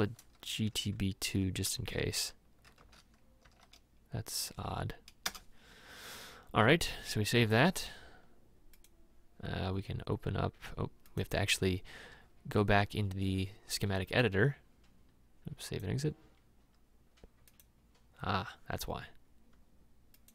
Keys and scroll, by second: 2.0 shift+g, 2.2 shift+t, 2.8 shift+b, 3.5 2, 5.3 Return.